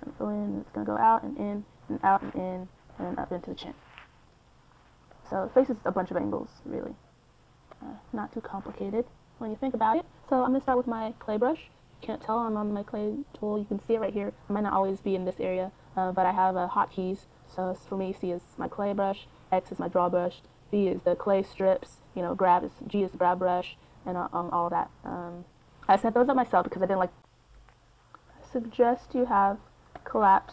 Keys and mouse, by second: 0.5 f, 3.3 click, 3.5-10.6 middle drag, 10.7 middle click, 11.9-15.1 middle drag, 15.1-17.3 drag, 19.0-23.7 drag, 23.5 f, 24.2-26.0 drag, 26.4 middle click, 26.6-30.5 drag.